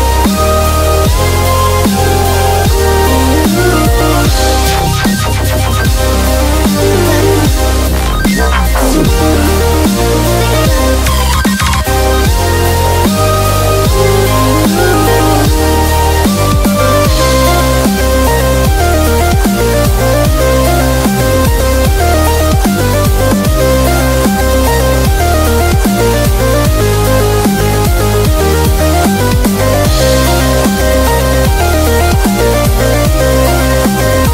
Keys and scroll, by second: 5.6 super+=, 6.7-7.7 typing, 18.7 super+-, 18.8 super+-, 19.2 super+-, 21.0 super+=, 26.6 super+-, 26.8 super+-, 28.4 super+=.